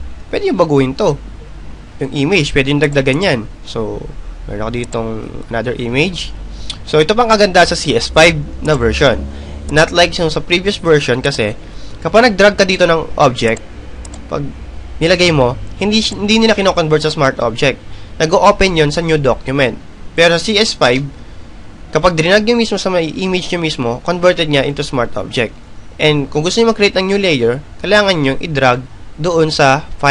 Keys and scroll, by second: 24.5 Return.